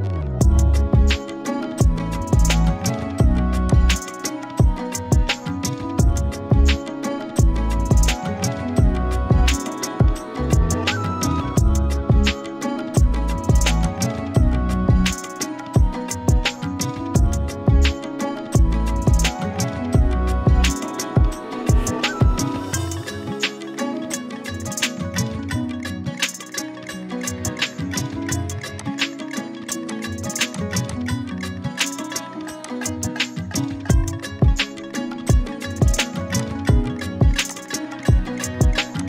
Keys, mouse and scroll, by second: 3.7 click, 6.5 shift+p, 7.2 shift+t, 8.9 e, 10.3-12.4 typing, 13.7 click, 15.4-18.2 typing, 19.7-22.5 typing, 24.2-26.2 typing, 28.8 click, 30.2 z, 30.5 click, 30.8 z, 30.9 click, 38.9-39.0 shift+drag.